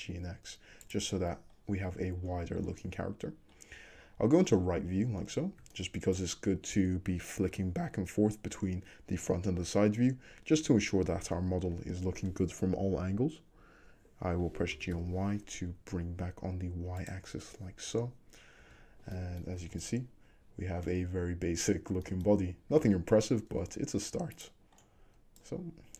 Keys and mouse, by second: 1.0-5.7 middle drag, 4.0 `, 5.7-6.2 shift+drag, 10.7 a, 14.8 g, 17.4-19.6 middle drag, 17.9 `, 18.7 Tab, 19.7 alt+z, 21.1 `, 22.9 alt+z, 23.6 Tab, 24.4 click, 25.4-25.9 drag.